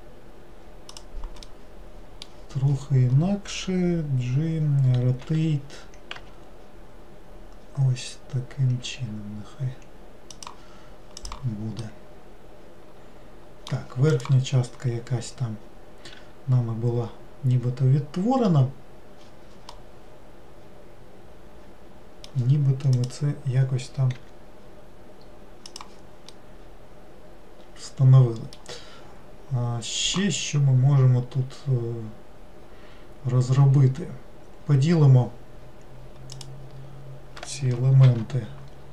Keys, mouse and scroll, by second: 1.5-4.7 middle drag, 11.3 click, 11.9-15.1 middle drag, 19.8-22.8 middle drag, 23.0 click, 26.4-29.5 middle drag, 36.4 click, 38.1 ctrl+r.